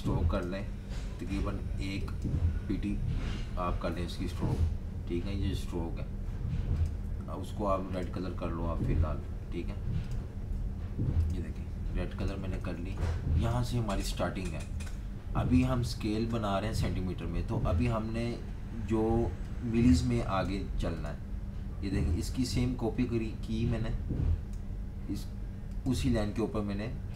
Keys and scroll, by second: 11.8-12.8 typing, 14.6 typing, 17.2 v.